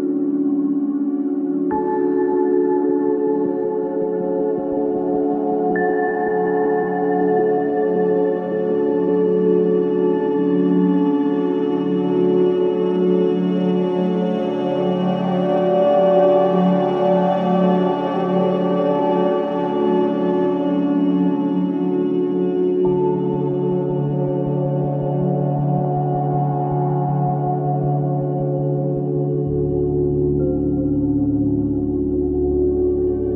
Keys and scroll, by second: 4.8 ctrl+d, 6.1 ctrl+shift+z, 7.3 ctrl+z, 9.8 alt+BackSpace, 12.8 ctrl+BackSpace, 13.8 alt+BackSpace, 15.4 alt+BackSpace, 16.0 ctrl+BackSpace, 17.7 ctrl+z, 22.9 ctrl+shift+i, 24.0 alt+BackSpace, 25.2 ctrl+BackSpace, 30.3 ctrl+d.